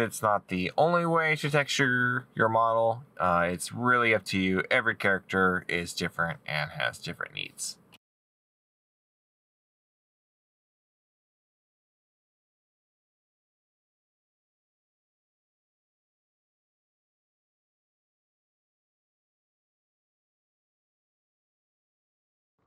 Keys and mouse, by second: 9.9 middle click, 10.3 middle click, 12.1 right click, 12.2 middle click, 13.8 middle click, 15.0 middle click.